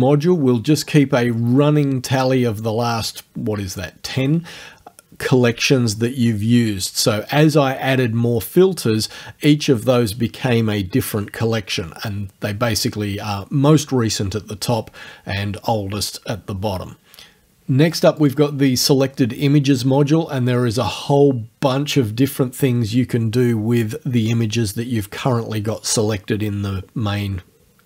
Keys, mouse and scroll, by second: 18.2 click.